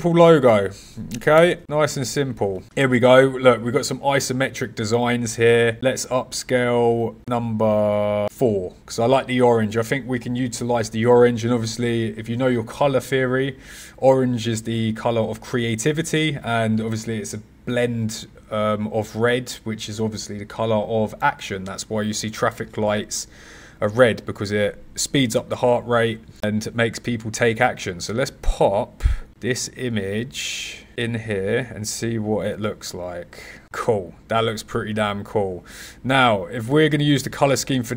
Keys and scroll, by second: 1.3 ..